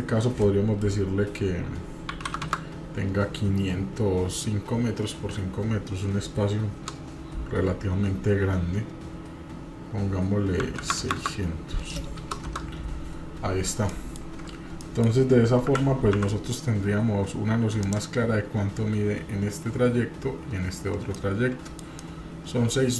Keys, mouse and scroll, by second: 2.4 KP_0, 11.0 KP_0, 13.9 middle drag, 14.3-14.7 scroll up 2, 14.8 middle click, 15.7 g, 21.1-21.9 middle drag, 22.0-22.9 middle drag.